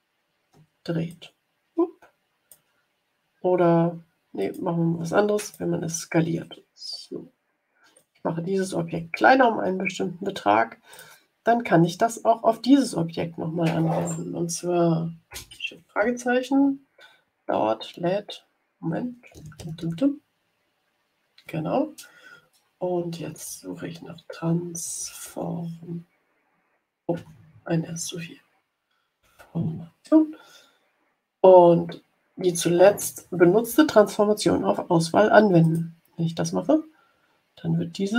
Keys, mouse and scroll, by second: 1.0-2.6 ctrl+drag, 4.3 click, 5.4 click, 6.3-8.1 ctrl+drag, 10.8 click, 22.7-25.7 typing, 27.1-30.1 typing, 35.6 click.